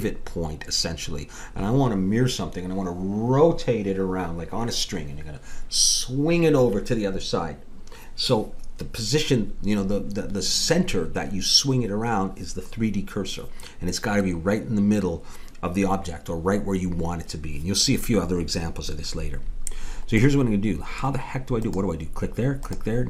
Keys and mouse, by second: 20.2-23.0 middle drag, 21.6-23.0 drag, 21.6-23.0 right drag.